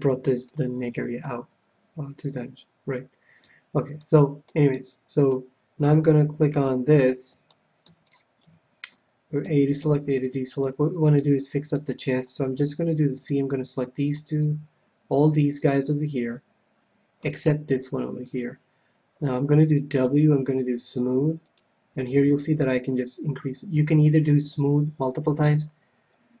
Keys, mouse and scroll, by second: 3.4 KP_1, 3.9-6.6 middle drag, 6.7-8.3 drag, 7.5-10.1 middle drag, 8.4 KP_1, 9.4 a, 9.8 a, 10.2-13.3 middle drag, 12.6 c, 18.4-20.1 right drag, 20.3 w, 21.6 w.